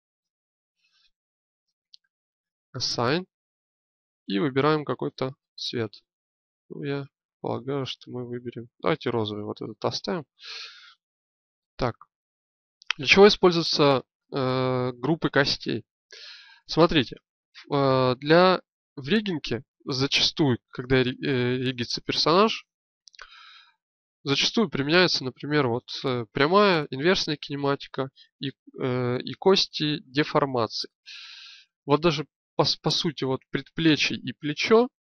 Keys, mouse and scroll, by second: 2.8-12.9 drag.